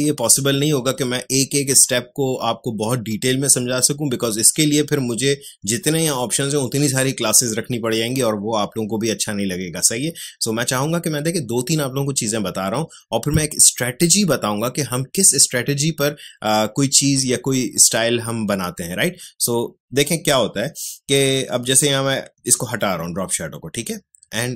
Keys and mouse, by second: 21.6 click.